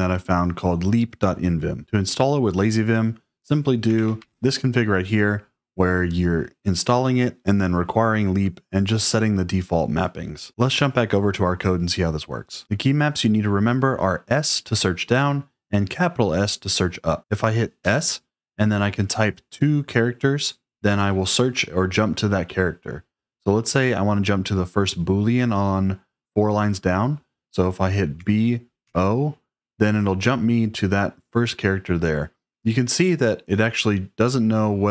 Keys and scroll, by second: 3.7 v, 4.1 shift+5, 17.7 s, 28.1 b, 28.7 o.